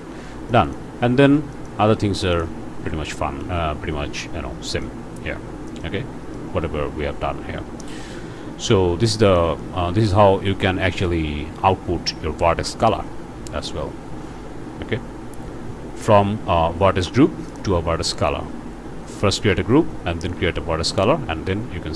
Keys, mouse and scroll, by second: 0.0 scroll down 2, 0.5 click, 1.2 scroll down 2, 1.5 click, 2.4 ctrl+shift+click, 3.2 ctrl+shift+click, 3.6 scroll up 1, 4.7 click, 5.8 click, 7.5 scroll up 1, 7.8 click, 8.5-9.1 scroll up 2, 9.4 ctrl+shift+click, 11.1 scroll down 2, 15.9 scroll up 2, 17.5 click.